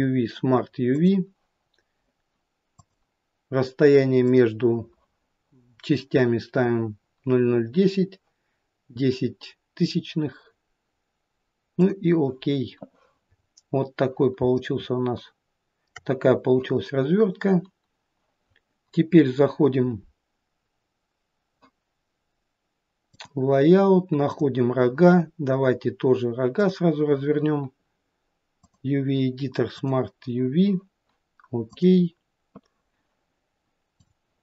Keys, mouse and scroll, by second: 23.3 click, 24.4 click.